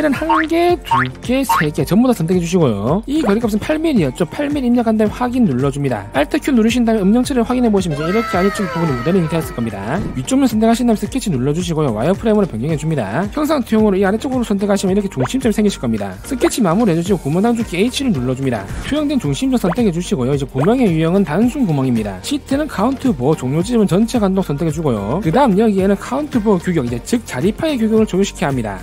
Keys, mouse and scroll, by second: 0.6 click, 1.2 click, 1.9 click, 4.7 click, 6.0 click, 7.4 alt+q, 7.8 click, 8.4 shift+middle click, 9.6 shift+middle click, 10.0 middle click, 11.2 click, 12.8 alt+w, 13.2 click, 15.3 click, 17.5 s, 18.2 scroll up 1, 20.2 click, 21.8 click, 23.6 click, 25.2 click.